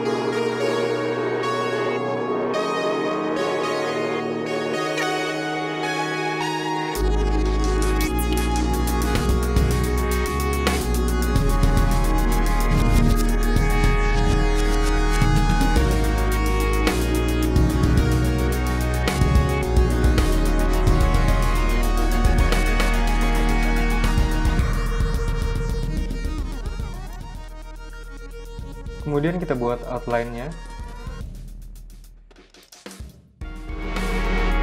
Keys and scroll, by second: 3.4 v, 8.6 p, 11.0 super+z, 11.7 v, 12.0 a, 13.4 super+z, 17.3 super+z, 17.5 v, 18.0 p, 19.4 v, 20.4 super+x, 20.5 v, 20.7 super+z, 21.1 super+v, 23.0 a, 24.8 v, 30.0 super+c, 30.4 super+v, 33.2 BackSpace.